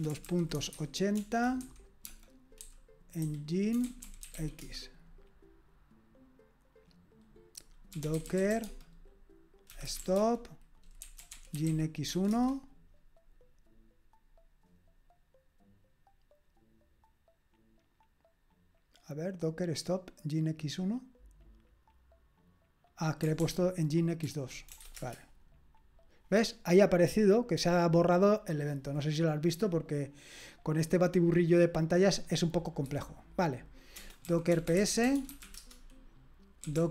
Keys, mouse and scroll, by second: 0.0-4.8 typing, 7.7-12.6 typing, 23.5 ctrl+o, 24.2 ctrl+p, 24.7 BackSpace, 24.9 BackSpace, 25.0 Return, 34.0-36.9 typing.